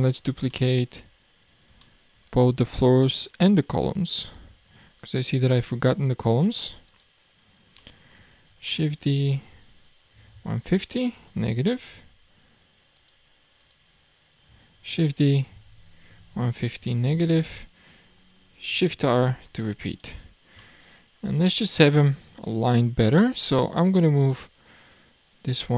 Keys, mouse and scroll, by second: 1.3-1.8 scroll up 2, 1.8-2.9 shift+middle drag, 2.9 shift+click, 3.6 shift+click, 4.9-6.3 scroll down 2, 6.3 click, 6.9 click, 7.8-8.5 middle drag, 8.5 shift+d, 12.9 click, 13.6 click, 14.8 shift+d, 19.1 shift+r, 19.9 drag, 20.3-20.6 scroll down 4, 20.6-21.4 middle drag, 21.4-21.8 scroll up 6, 22.0-23.6 middle drag, 23.6 click, 24.5-25.5 scroll down 3, 25.5 click.